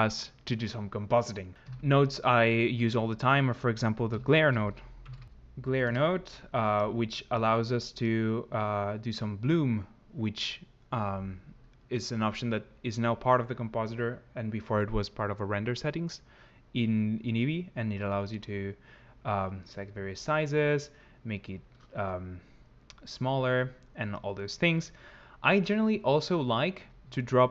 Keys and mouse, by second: 1.5 ctrl+x, 1.5 n, 2.7 click, 7.9 click, 18.0 click, 20.0 shift+click.